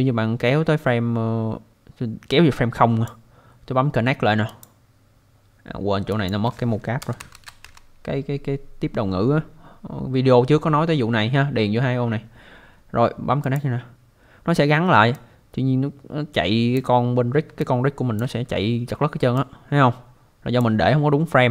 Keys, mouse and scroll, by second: 4.5 click, 6.3 click, 6.8-8.1 typing, 13.4 click, 15.2 click, 17.6 alt+click, 19.4 click.